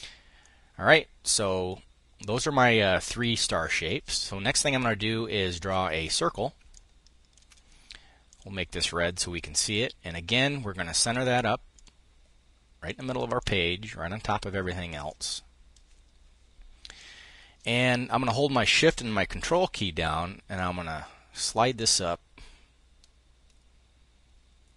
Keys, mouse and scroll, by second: 0.0-2.2 drag, 6.2 ctrl+click, 7.8 ctrl+click, 10.6 click, 11.3 click, 12.4 click, 14.6-16.5 drag, 20.2-24.7 ctrl+shift+drag.